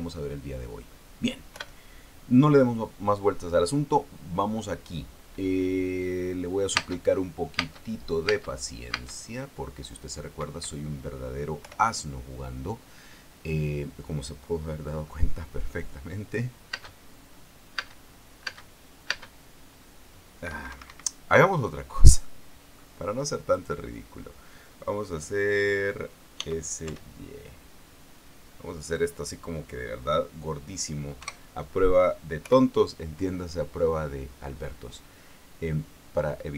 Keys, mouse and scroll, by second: 2.3 p, 7.5 space, 8.3 space, 9.0 space, 11.1 Escape, 12.3 p, 17.5 space, 18.5 space, 19.2 space, 21.1 Escape, 22.9 middle click, 24.2 right click, 25.6-26.2 scroll down 2, 27.1 s, 27.6 y, 29.5 click, 31.9 KP_0, 33.1 p.